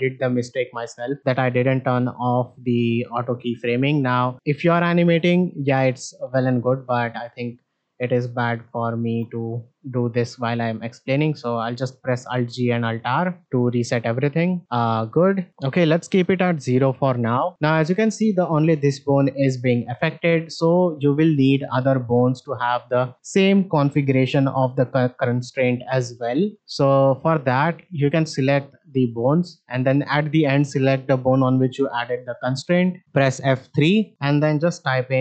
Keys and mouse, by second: 3.7 click, 7.1 click, 7.6 click, 8.1 click, 13.4 shift+middle click, 14.5 click, 15.2 click, 15.9 shift+middle drag, 17.0 shift+middle drag, 22.7-28.2 drag, 28.5-29.1 shift+drag, 33.6 F3.